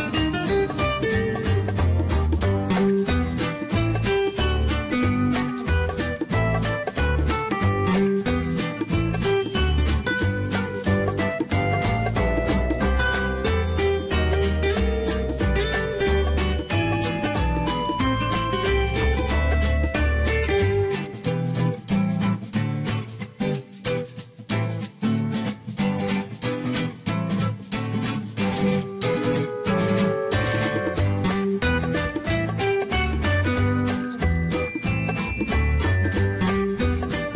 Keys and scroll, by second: 13.6 ctrl+z, 17.1 ctrl+z.